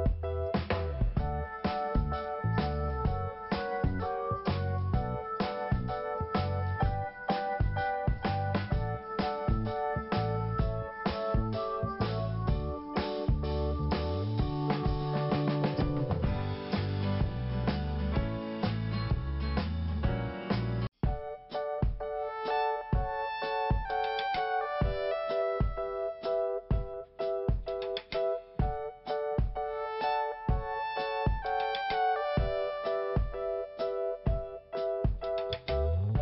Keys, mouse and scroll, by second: 0.6 p, 2.4 click, 6.3 scroll up 1, 7.4 click, 7.4 click, 10.2 click, 10.3 click, 11.6 click, 11.7 click, 13.0 click, 13.1 click, 20.2 click, 20.3 click, 21.1 click, 22.3 scroll down 1, 23.0 scroll up 1, 24.1 click, 25.0 click, 25.0 click, 26.4 click, 28.1 click, 29.0 scroll up 2, 31.3 scroll down 1, 31.8 scroll up 1, 33.0 click, 34.8 click, 35.9 click.